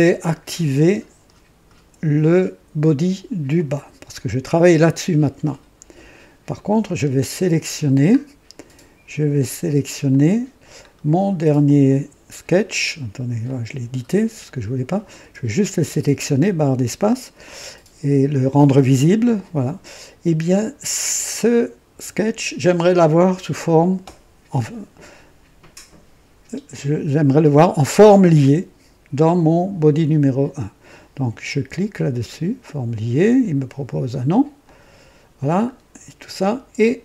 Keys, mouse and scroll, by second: 0.4 scroll up 2, 3.5 click, 6.4 click, 7.1-7.8 scroll down 4, 10.0 click, 10.8 scroll down 1, 11.6 click, 13.4 click, 15.1 space, 32.2 click, 34.5 click, 35.6-36.0 scroll up 1.